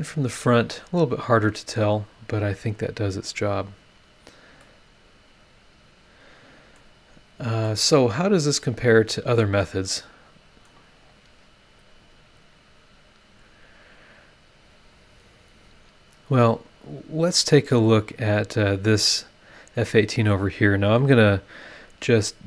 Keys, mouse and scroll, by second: 0.3 click, 1.0 scroll up 1, 1.8 scroll up 1, 4.1 scroll down 1, 4.6-6.9 middle drag, 4.7-6.9 drag, 4.7-6.9 right drag, 6.9 scroll down 1, 7.6-9.6 middle drag, 7.7-9.6 drag, 7.7-9.6 right drag, 9.8-10.8 middle drag, 9.9 click, 9.9 right click, 12.4-12.7 scroll down 2, 13.3-13.6 scroll up 2, 14.8 click, 15.6 click, 18.1 click.